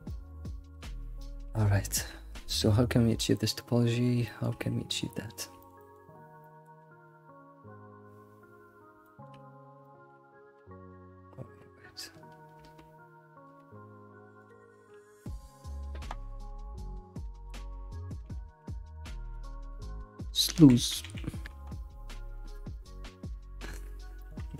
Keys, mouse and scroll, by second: 0.0 scroll down 3, 0.1 middle click, 1.0 scroll up 4, 1.2 alt+middle click, 1.5 middle click, 4.3-5.6 middle drag, 9.0 shift+middle click, 9.6 scroll up 3, 9.8-12.8 shift+middle drag.